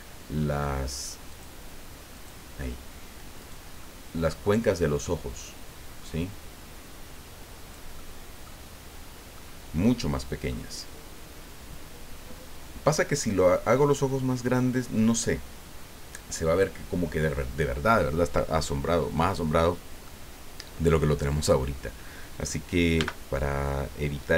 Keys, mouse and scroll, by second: 1.3 click, 2.1 click, 3.4 right click, 3.8-5.2 middle drag, 6.2-7.9 drag, 8.0 click, 9.0 scroll down 1, 9.3-10.6 drag, 11.3 scroll down 1, 20.0 click, 23.0 n, 23.9-24.3 scroll down 1.